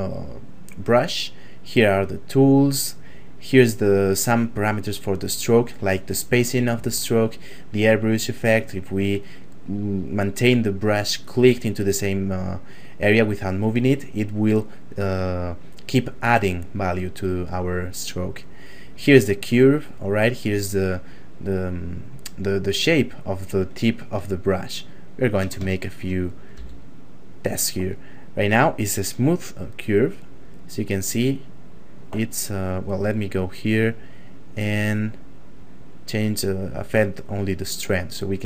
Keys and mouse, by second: 17.4 click, 24.4 ctrl+middle click, 25.7 shift+middle click, 26.5 f, 27.3 click, 30.2 click, 32.6 click.